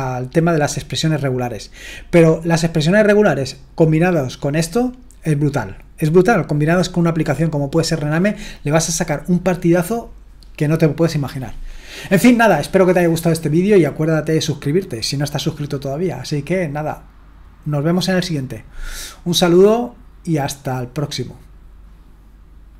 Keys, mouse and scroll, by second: 22.7 click.